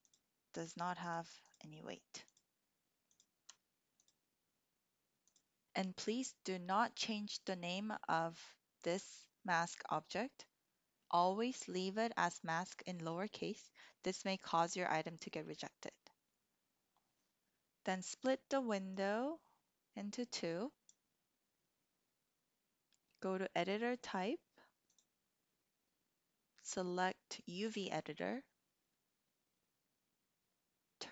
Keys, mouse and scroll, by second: 1.0 ctrl+click, 2.2 ctrl+click, 4.1 click, 19.0-20.9 drag, 24.8-27.8 drag.